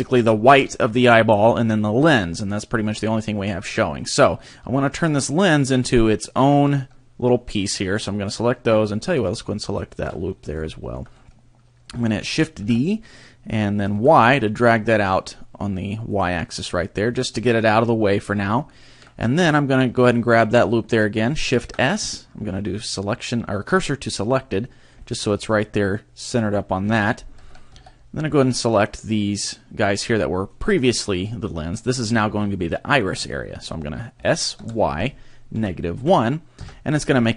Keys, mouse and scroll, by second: 4.6 b, 8.7-9.2 scroll up 2, 9.7 alt+shift+right click, 10.3 scroll down 2, 10.6 shift+middle click, 12.7 shift+d, 16.2 click, 18.3-18.7 scroll up 1, 18.7 shift+middle click, 20.1 alt+right click, 21.5 shift+s, 25.0 middle click, 26.8 KP_3, 27.4 a, 27.7 b, 30.1 shift+middle click, 34.1 s.